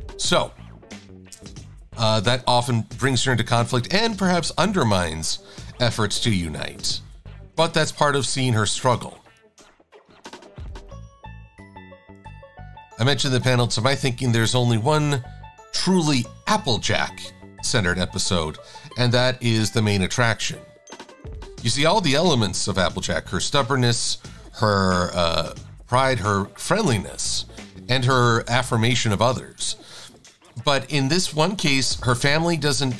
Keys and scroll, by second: 29.7 shift+x, 30.5 shift+super+a.